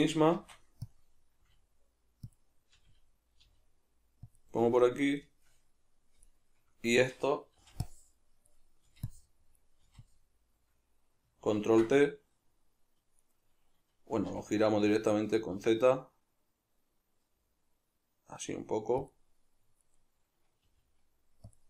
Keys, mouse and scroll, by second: 0.4 shift+d, 1.0 click, 1.4 r, 2.4 click, 2.8 g, 3.0 click, 3.4 g, 4.4 click, 5.2-6.2 shift+middle drag, 6.2 right click, 7.6 b, 11.6 ctrl+t, 13.3 right click, 14.3 r, 19.1 click, 19.8 right click, 20.6 g, 21.5 click.